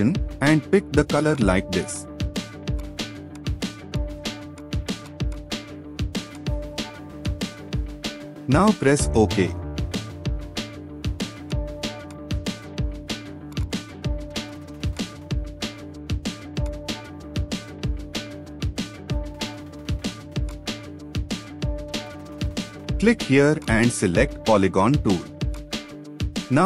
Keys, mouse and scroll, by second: 10.8-11.8 scroll up 1, 13.6 double click, 17.5 ctrl+z, 19.2-19.5 scroll up 1, 23.6 right click.